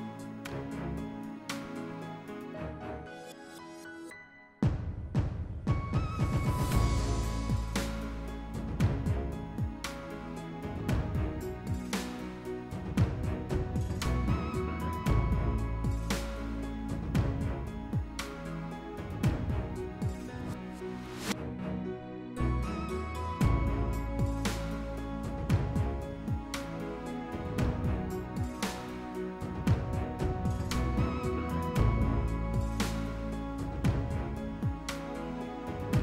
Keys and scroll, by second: 1.5-2.9 typing.